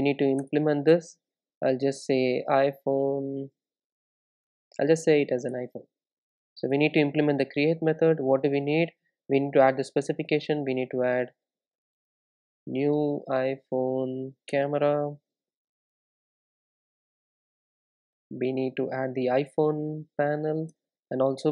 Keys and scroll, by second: 0.5 alt+Return, 10.2 Return, 20.8 Return.